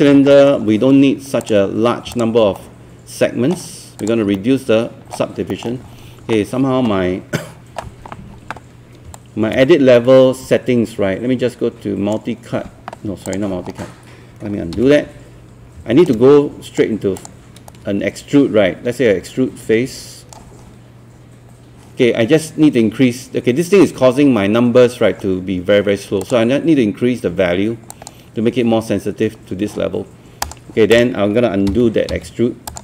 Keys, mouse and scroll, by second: 0.3 alt+middle click, 1.4 click, 2.6 middle click, 4.0 click, 4.3 middle click, 9.2-12.3 shift+right drag, 13.3 click, 13.8 scroll up 1, 14.5 scroll down 1, 14.7 z, 15.8 q, 16.1 right click, 17.2 click, 18.3-21.3 shift+right drag, 26.2-27.3 drag, 31.7 z, 32.1 z, 32.7 click.